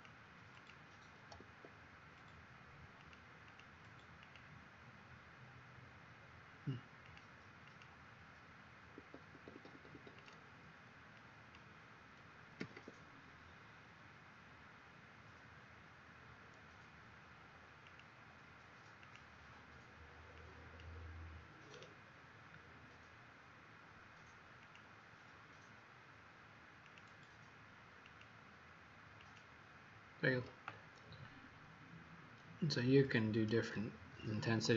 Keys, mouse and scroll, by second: 0.5 click, 1.3 Escape, 2.9 click, 3.4 click, 4.2 click, 7.6 click, 8.9 Escape, 9.5 Escape, 9.7 Escape, 9.9 Escape, 10.1 click, 12.5 v, 12.7 v, 15.6-17.1 typing, 17.8 click, 21.6 right click, 24.6 click.